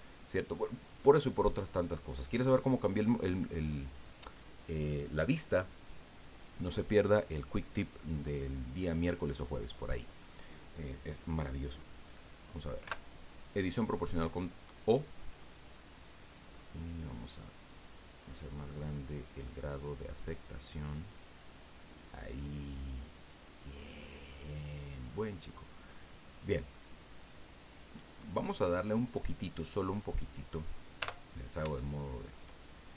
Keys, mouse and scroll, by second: 12.8 o, 15.0-16.6 drag, 16.6-18.1 scroll down 4, 18.9-19.4 scroll down 2, 19.7 scroll down 2, 20.2-20.5 scroll down 2, 20.9 scroll down 2, 21.4 scroll down 2, 25.5 scroll down 2, 25.9-28.3 drag, 31.0 o, 31.8 shift+click.